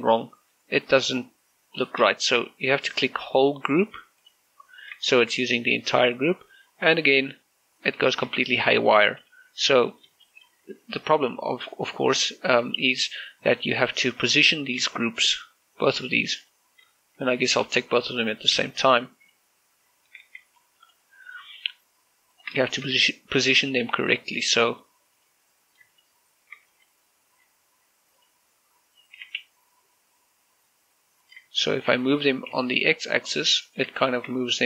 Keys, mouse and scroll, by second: 0.1 middle click, 0.4-1.1 scroll up 1, 2.9 shift+middle click, 5.0 click, 5.6 scroll down 1, 5.9 shift+middle click, 6.3 middle click, 7.5-8.9 middle drag, 7.5 scroll up 1, 10.7 shift+middle click, 11.0-11.3 scroll up 1, 12.9 click, 13.4 scroll down 1, 15.0 shift+click, 15.7 shift+middle click, 17.2 click, 17.7-19.3 typing, 18.9 click, 20.0 right click, 20.7 scroll down 1, 20.9-21.2 typing, 21.4 click, 21.9 scroll up 1, 23.1 shift+click, 23.5 shift+middle click, 24.3 g, 24.7 z, 25.9 right click, 26.7 shift+right click, 27.5 g, 28.9 right click, 29.9 g, 30.2 x, 32.0 click, 32.3 shift+middle click, 33.0 g, 33.3 x, 34.5 click.